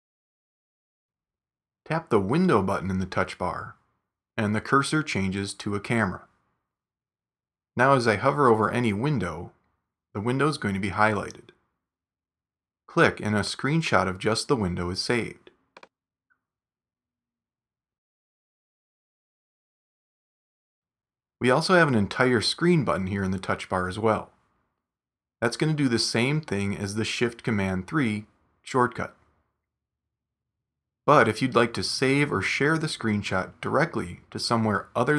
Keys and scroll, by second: 16.4 space, 19.5 space, 21.9 shift+super+4.